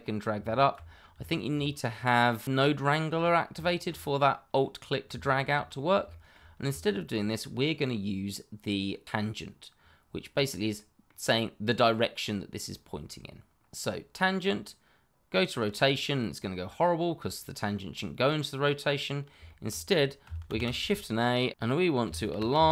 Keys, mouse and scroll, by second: 0.9 scroll down 1, 1.2 shift+middle click, 3.1-3.5 scroll up 1, 3.6 shift+middle click, 3.7 middle click, 3.8 shift+middle click, 5.2 shift+middle click, 5.3 middle click, 5.6-6.0 scroll up 1, 6.0 shift+middle click, 6.8 ctrl+right click, 6.9 right click, 6.9 ctrl+right click, 10.2-10.7 scroll down 1, 10.7 middle click, 12.8-13.1 scroll down 1, 13.7 click, 18.8-19.1 scroll up 1, 19.4 shift+middle click, 19.5 middle click, 21.5-22.7 typing.